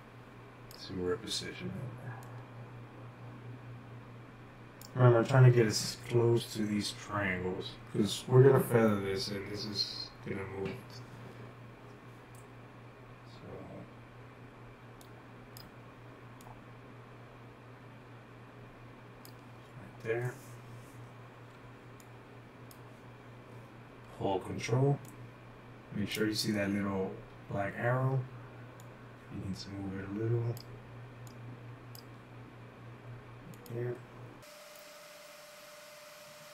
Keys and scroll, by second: 21.6-22.9 typing, 23.9-24.7 typing, 34.7-36.3 typing.